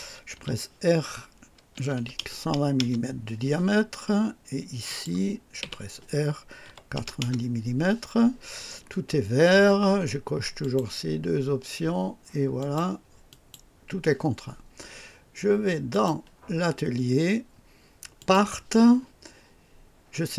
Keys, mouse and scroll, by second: 0.3 typing, 1.8 KP_1, 2.0 KP_2, 2.4 KP_0, 2.8 KP_Enter, 4.9 click, 5.6 r, 6.7-7.2 typing, 7.2 KP_Enter, 10.6 click, 12.6 click, 13.3 click, 15.9 click, 18.2 click.